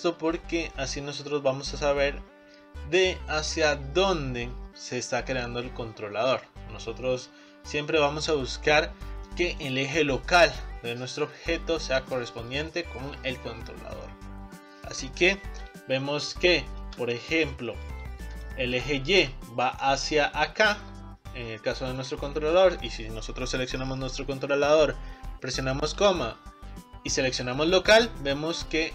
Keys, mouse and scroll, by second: 0.4-1.2 scroll up 2, 1.2-1.8 scroll up 3, 9.3-14.3 middle drag, 14.3-15.5 scroll down 5, 15.5-16.0 scroll up 3, 16.0-16.6 scroll down 1, 16.6-18.0 shift+middle drag, 18.0-18.4 scroll up 6, 18.5-21.0 middle drag, 21.0-21.3 scroll down 1, 21.3-22.0 scroll up 3, 22.0 click, 22.5 click, 25.2 ., 26.0 ,, 27.9 ,, 28.5-28.9 scroll down 1.